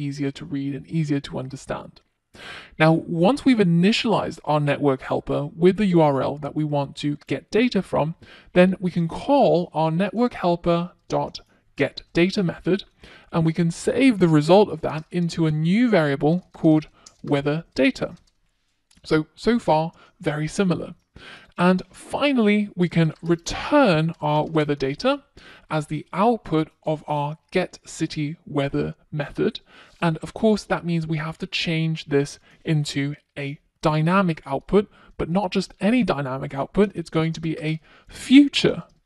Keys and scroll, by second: 24.1 Return.